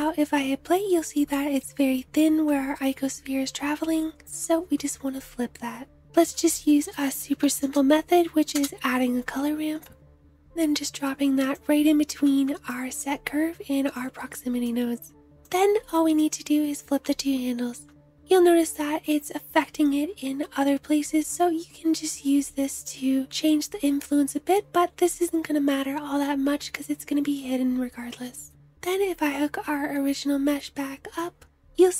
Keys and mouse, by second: 3.1 space, 6.1-11.5 drag, 6.1 shift+a, 18.3 space, 20.3 space, 23.4 space, 31.2 space.